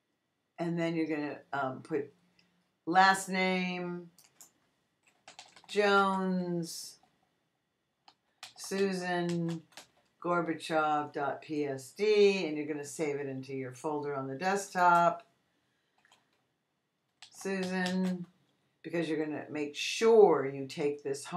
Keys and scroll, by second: 5.0-6.9 typing, 8.0-9.9 typing, 16.9-18.5 typing.